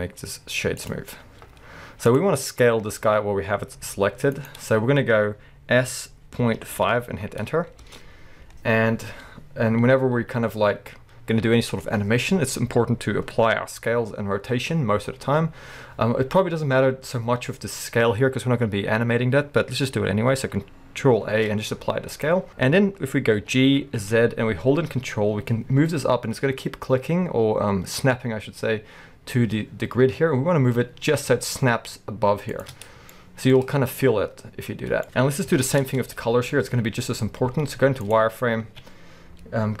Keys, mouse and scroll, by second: 1.2-1.6 scroll down 2, 1.6-2.1 scroll up 2, 3.9 g, 4.5 right click, 5.9 s, 7.9 Return, 10.9-11.7 scroll up 1, 15.3 scroll down 1, 21.2 ctrl+a, 22.5-23.4 scroll down 2, 23.4 g, 32.6 ctrl+click, 32.8 scroll up 2, 33.1-39.8 shift+middle drag, 34.7-35.0 scroll down 2, 35.5 KP_1, 35.8 Tab, 36.2-37.5 scroll up 2, 37.5 z, 38.7 alt+a.